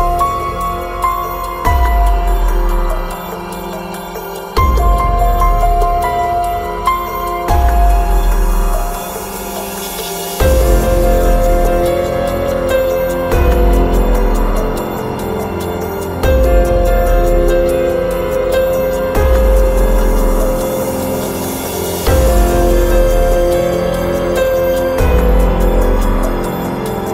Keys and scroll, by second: 4.4 Escape, 9.4 Escape, 11.9 ctrl+a, 15.9 ctrl+a, 20.8 Escape, 22.9 Escape, 23.8 ctrl+a.